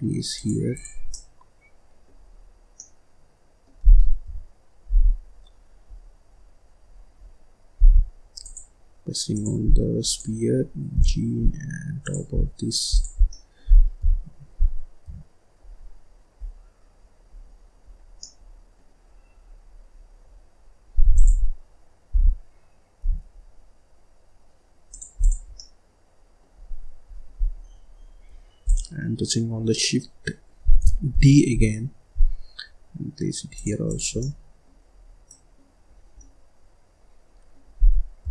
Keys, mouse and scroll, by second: 0.6 click, 1.0-2.1 middle drag, 2.1-2.5 scroll up 1, 2.5 scroll down 2, 2.7-4.1 middle drag, 4.1 KP_7, 4.9-5.5 scroll down 1, 5.5-5.8 scroll up 2, 5.8-6.1 scroll down 1, 6.1-7.2 scroll up 12, 7.7 g, 8.3 click, 9.2 click, 10.0 click, 10.8 g, 12.3-12.8 scroll down 4, 12.8 click, 13.1 scroll down 1, 13.2 middle click, 13.9 KP_7, 14.9 KP_3, 15.7-16.3 scroll down 3, 16.3 scroll down 7, 16.9-17.2 scroll up 4, 17.2-17.8 scroll down 4, 17.8-18.1 scroll up 1, 18.1 middle click, 18.9-21.1 scroll up 24, 21.1 click, 22.0 g, 25.1 click, 25.4 scroll up 1, 25.5 middle click, 26.3-27.9 scroll down 22, 27.9-28.4 scroll up 8, 28.5 click, 30.5-31.0 scroll down 1, 31.0 shift+d, 33.8 click, 34.1 middle click, 34.8-35.2 scroll up 1, 35.2 middle click, 35.8-36.1 scroll up 1, 36.1-38.1 middle drag, 38.1 KP_7.